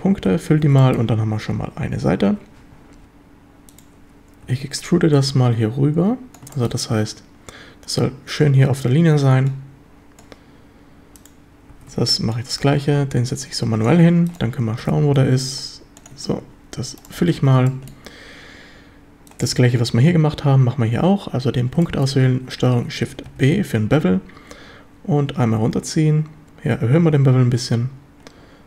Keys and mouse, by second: 0.5 a, 0.8 shift+drag, 1.5 z, 2.3 z, 4.4 e, 4.7 Escape, 5.1-6.3 drag, 6.5 shift+middle click, 9.5 click, 11.7 e, 11.9 Escape, 12.3-13.9 drag, 14.8 g, 15.2 x, 16.0 ctrl+click, 17.2 f, 17.4 a, 17.7-18.0 shift+middle drag, 21.8 shift+middle drag, 22.0 click, 23.3 ctrl+shift+b.